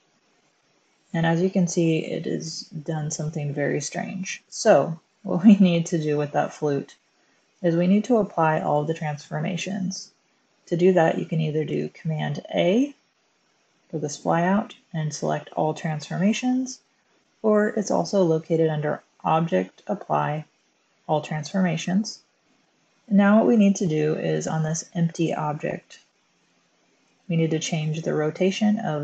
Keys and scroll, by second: 2.7-3.5 typing, 12.1 super+a.